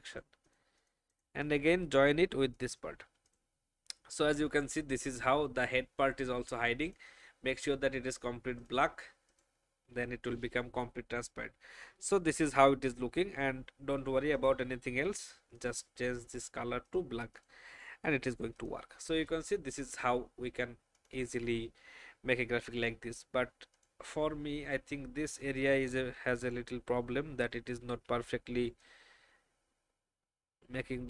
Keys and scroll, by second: 3.2 v, 27.9 alt+shift+e.